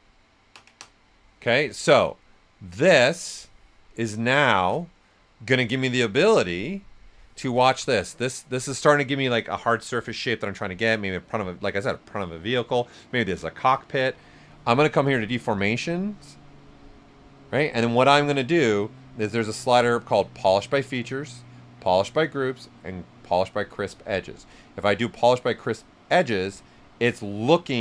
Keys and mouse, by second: 3.8-5.9 right drag, 7.0 click, 7.5 shift+f, 7.9 right click, 15.1 click, 15.1 click, 24.6-27.8 drag.